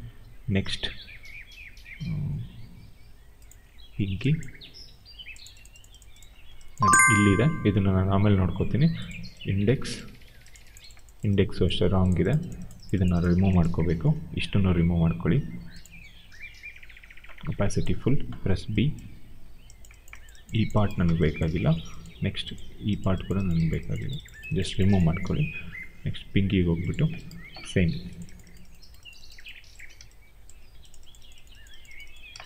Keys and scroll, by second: 18.4 b.